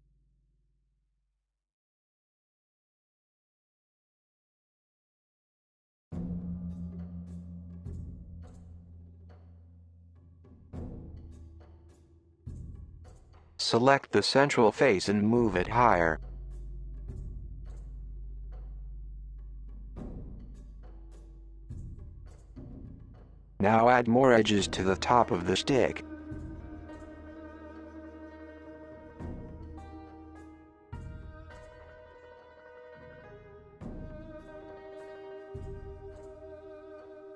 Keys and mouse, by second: 1.5-2.9 middle drag, 2.7 KP_1, 3.3-5.0 drag, 5.5 middle click, 6.5 middle click, 8.0 KP_1, 9.7 middle drag, 10.2-11.8 drag, 11.9 KP_1, 13.1 g, 19.0 KP_7, 21.0 KP_7, 21.6 KP_1, 23.9 ctrl+r, 29.4 ctrl+r, 32.2 Escape, 32.4 Escape, 32.5 click, 32.9 super+z, 33.1 super+z, 33.8 Tab, 33.9 Tab, 34.3 click, 35.6 alt+click, 36.4 alt+shift+click, 36.8 alt+shift+click, 37.1 click.